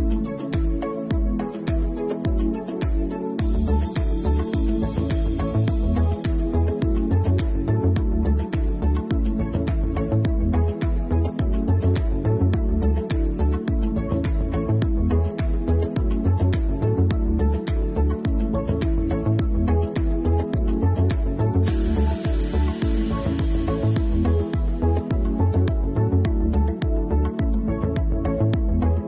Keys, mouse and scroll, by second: 1.2 click, 3.5 ctrl+l, 5.8 click, 7.9 alt+q, 9.8 click, 10.9 alt+q, 12.9 click, 13.3 middle click, 14.1 alt+q, 14.6 middle click, 15.5 click, 16.3 h, 16.8 shift+middle click, 17.1 middle click, 21.5 click, 21.9 shift+middle click, 22.3 middle click, 26.7 click, 27.9 alt+click, 27.9 alt+middle click.